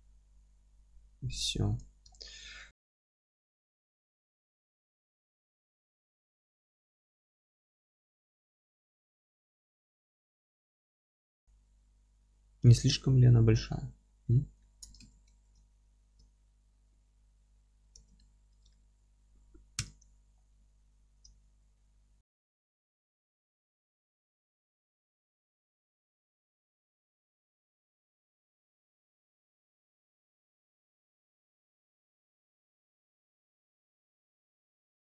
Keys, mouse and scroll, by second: 0.2 scroll up 1, 0.4 g, 1.1 Escape, 1.4-5.6 middle drag, 1.6 Tab, 5.6 click, 5.9-6.4 scroll up 1, 6.4 Tab, 6.8 click, 7.1-8.9 alt+middle drag, 7.5 g, 8.9 click, 9.0 z, 9.2-14.4 alt+middle drag, 9.7 scroll down 2, 10.7-11.0 scroll down 2, 13.9-14.2 scroll down 1, 14.6 middle click, 15.0 ctrl+space, 17.9 ctrl+space, 17.9-25.2 middle drag, 19.1-19.7 scroll up 1, 19.7 KP_7, 20.2 scroll up 1, 20.6 scroll down 1, 20.9-21.3 scroll up 1, 21.3 alt+z, 21.9-22.7 scroll up 2, 22.7 Tab, 23.0-23.4 scroll up 2, 23.4 Tab, 23.6 scroll up 2, 23.9-24.8 scroll down 2, 24.8 alt+z, 25.2 click, 25.5 h, 25.6-26.2 scroll up 2, 26.0 click, 26.2 Tab, 27.2 1, 27.5 a, 29.7 click, 29.8 Tab, 30.0-30.3 scroll down 1, 30.3-33.0 alt+middle drag, 30.6 scroll down 1, 31.0 alt+q, 31.4 alt+q, 31.5 scroll down 1, 32.0 scroll up 2, 32.6 alt+h, 32.8 scroll up 2, 33.0 click, 33.1-33.5 alt+middle drag, 33.5 click, 33.7 alt+middle click, 33.9 scroll down 2, 34.0 g, 34.7 click, 34.8 scroll down 2, 34.9-35.1 alt+middle drag.